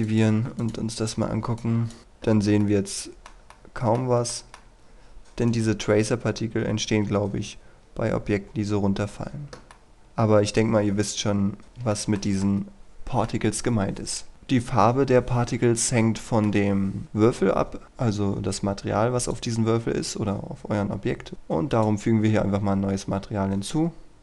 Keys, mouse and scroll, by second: 2.6-4.2 middle drag, 4.3 shift+middle click, 5.4 right click, 6.2-9.0 scroll up 1, 9.0 scroll down 1, 9.7 middle click, 10.2 click, 10.7 scroll up 1, 11.6 click, 11.9-13.7 shift+middle drag, 14.3-15.9 scroll down 1, 19.3 click, 23.2-24.2 scroll up 1.